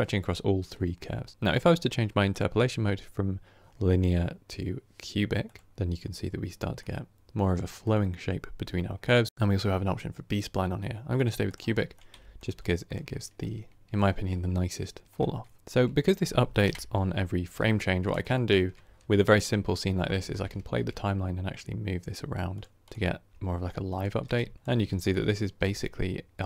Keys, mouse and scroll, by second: 2.2-5.3 drag, 5.7-8.9 middle drag, 8.9-11.4 drag, 11.8-12.7 middle drag, 12.7 click, 13.3-15.6 middle drag, 15.6 g, 15.6 g, 16.5 Right, 17.7-18.1 scroll down 1, 18.1-20.1 shift+middle drag, 20.1 shift+space, 20.7 g, 22.7 click, 23.3 r, 24.3 Tab, 24.5 click, 24.7 g.